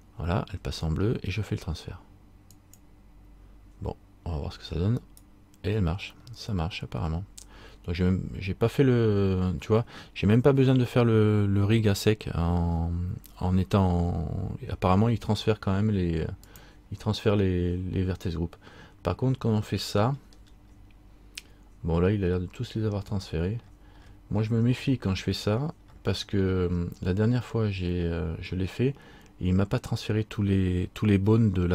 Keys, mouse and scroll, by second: 2.7 click, 5.2 right click, 6.4 middle click, 16.6 click, 18.8 scroll up 1, 20.1-20.5 scroll up 10, 22.5-24.1 scroll down 1.